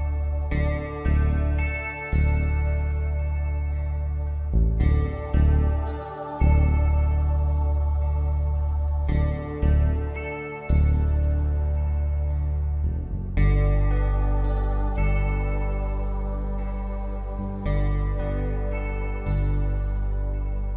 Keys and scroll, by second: 1.2 space, 2.5 space, 11.8 ctrl+alt+z, 12.9 ctrl+shift+z, 15.9 ctrl+Return, 19.1 shift+F6.